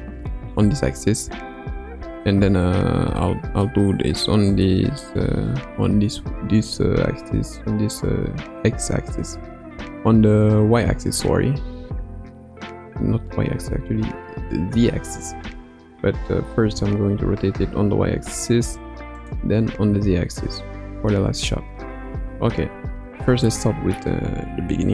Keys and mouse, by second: 3.2-5.0 middle drag, 6.8 r, 16.6 r, 19.8 r, 22.5 ctrl+z, 23.4-24.0 middle drag.